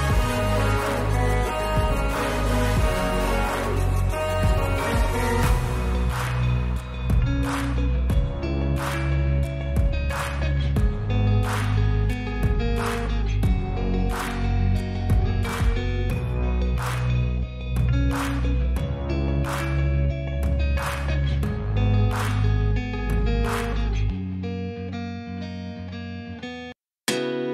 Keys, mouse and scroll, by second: 0.9-1.3 drag, 1.9 click, 2.5 click, 3.2 click, 4.2 w, 12.6 middle click, 13.7 shift+a, 16.9 click, 18.3 g, 18.6 middle click, 19.0 g, 19.3 middle click, 19.6 click, 20.0 s, 20.8 r, 22.5 click, 22.9 g, 23.2 middle click, 24.1 click, 24.8 s, 24.9 middle click, 25.7 g, 25.9 middle click, 26.3 click, 26.4 g, 26.6 middle click, 26.9 click.